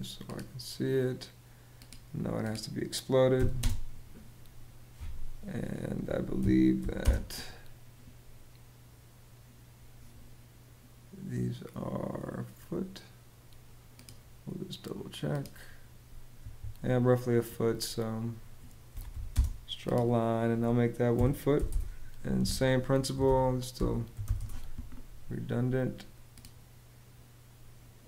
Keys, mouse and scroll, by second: 3.0 x, 3.2 space, 6.0 d, 6.4 i, 6.7 space, 16.3 Escape, 18.3-19.3 typing, 20.8 l, 21.2 !, 21.3 Return, 21.9 Escape, 22.6-24.4 typing, 26.0 click.